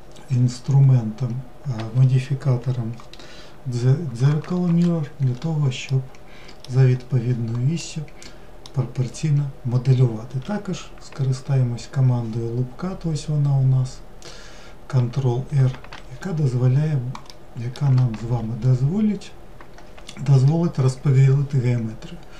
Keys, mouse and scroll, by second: 5.9-10.9 middle drag, 17.3-18.2 middle drag, 18.2 ctrl+r.